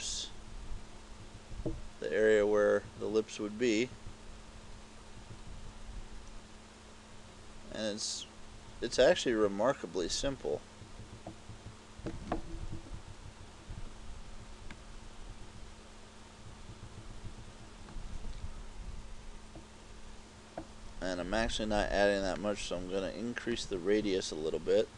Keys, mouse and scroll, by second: 12.6 KP_4, 13.0 KP_4, 13.4 KP_4, 14.8 click, 22.4 click.